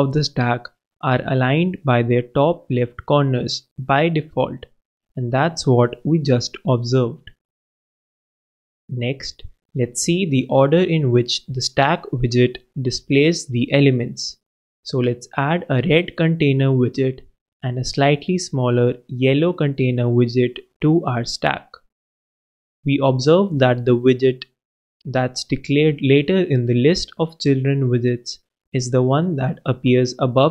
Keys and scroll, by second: 8.8 super+w, 10.1 shift+Return, 10.2 shift+c, 10.7 shift+Return, 10.8 shift+9, 11.1 shift+,, 13.6 shift+Return, 13.7 shift+o, 15.1 super+BackSpace, 15.2 super+s, 15.9 super+d, 16.2 super+BackSpace, 16.6 super+BackSpace, 16.7 super+s, 17.5 super+d, 18.0 super+BackSpace, 20.2 super+0, 20.6 super+Right, 21.6 super+Return, 21.7 super+s.